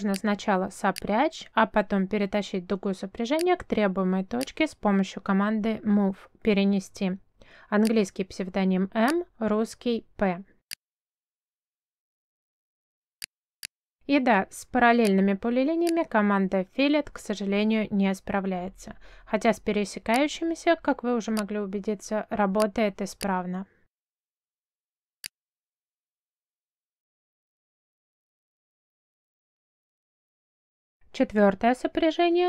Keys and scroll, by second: 2.1 f, 2.3 space, 6.3 m, 7.0 space, 8.4 space, 18.0 Escape, 19.3 space.